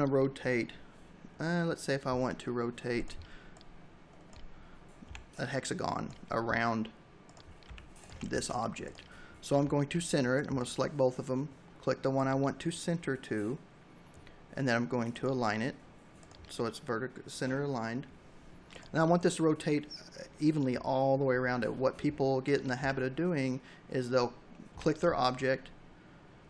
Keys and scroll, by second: 3.9 v, 6.5 v, 7.1 space, 21.5 r, 23.9 v, 26.2 r.